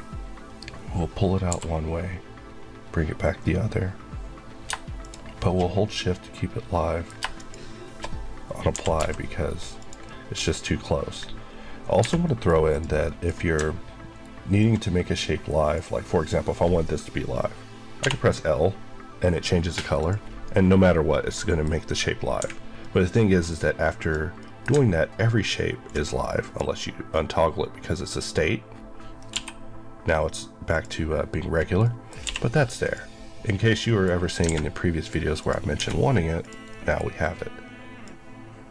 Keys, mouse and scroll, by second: 1.4 e, 4.9 shift+click, 6.0 middle click, 7.3 shift+click, 8.6 typing, 9.7 click, 10.0 middle click, 10.3 scroll up 1, 11.9 h, 12.2 middle click, 13.0 middle click, 13.2-14.0 scroll up 2, 14.5 ctrl+click, 17.9 l, 19.9 click, 21.2 middle click, 22.3 h, 22.7 middle click, 23.5-23.9 scroll up 1, 23.9 click, 24.3 middle click, 25.8 click, 29.2 l, 30.6 click, 31.4 scroll down 1, 31.7 middle click, 32.1 q, 32.7 click, 33.7 middle click, 34.1 scroll, 34.2 scroll down 1, 34.4 alt+a, 34.6 middle click, 35.3 click, 35.7 d, 36.3 click, 36.6 middle click, 37.0 scroll up 1, 37.9 click.